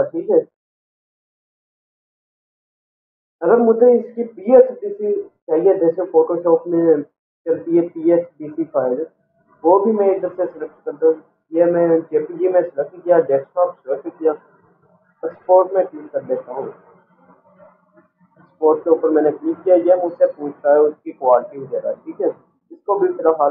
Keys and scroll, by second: 18.4 Return.